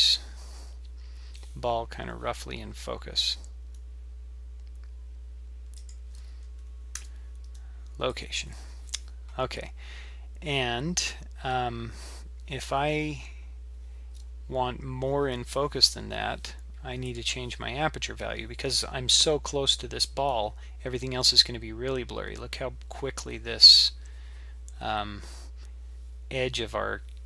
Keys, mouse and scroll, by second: 3.2 g, 3.3 g, 7.0 i, 8.2 i, 17.1 click, 17.2 click.